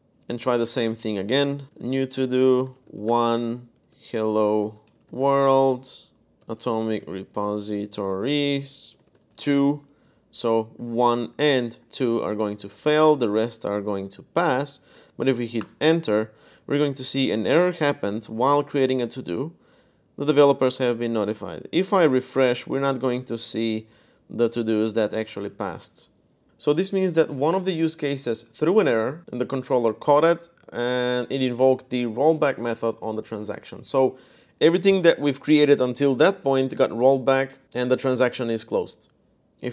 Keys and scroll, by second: 1.3-9.4 typing, 15.4 Return, 21.7 super+r, 22.3 super+r, 22.6 super+r.